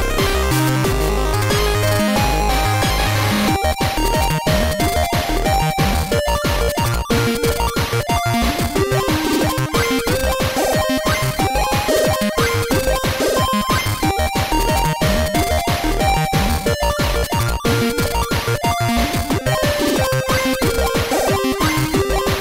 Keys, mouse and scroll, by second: 0.4 click, 1.8 click, 4.5 click, 7.8 space, 10.1-11.8 typing, 12.9-16.6 typing, 18.8-20.2 drag.